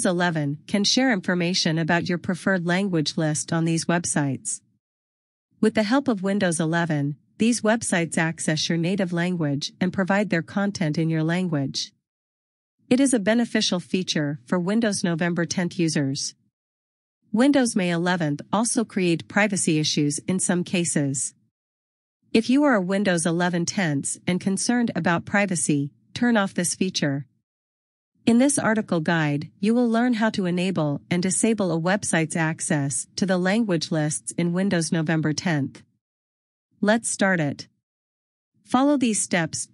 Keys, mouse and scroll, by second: 0.1 click, 0.2 scroll down 1, 5.2 scroll down 1, 9.0 click.